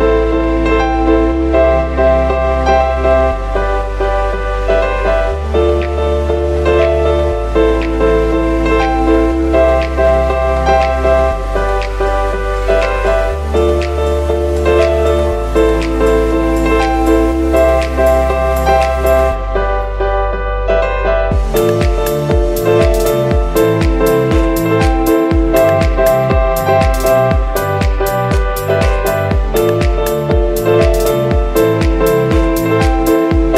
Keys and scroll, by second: 8.4 z, 15.4 super+z, 20.6 v, 21.9 v, 26.2 super+d, 26.6 super+d, 26.6 super+d, 28.3 z, 29.3 v, 31.7 super+z.